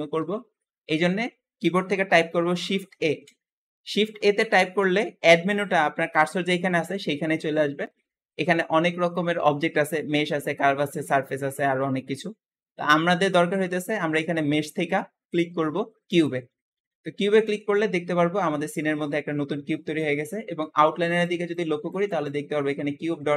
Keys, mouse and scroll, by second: 2.9 shift+a, 16.5-17.2 scroll down 4, 17.2 shift+middle click, 17.6-19.9 scroll up 1, 19.9-23.3 scroll up 1.